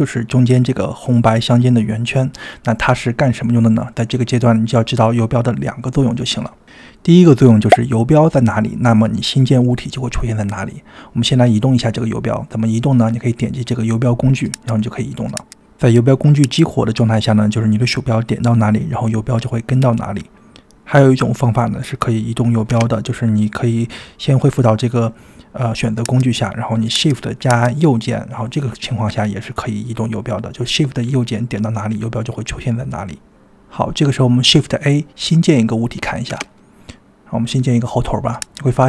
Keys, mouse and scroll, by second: 12.8-13.2 drag, 13.9 drag, 14.5 click, 15.4 click, 16.4-17.7 drag, 17.8 click, 18.3 click, 18.7 click, 23.2 shift+right click, 24.6 click, 25.9-27.2 shift+drag, 25.9 shift+right click, 29.8 click, 30.7 middle click, 32.3 click, 36.4 shift+a.